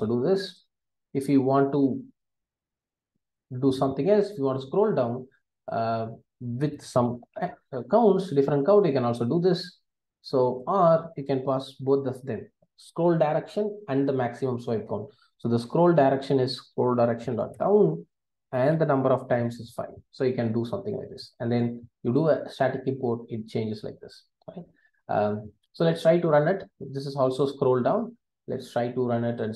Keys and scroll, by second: 14.9 Return, 17.7 Return, 21.4 alt+Return, 29.4 ctrl+r.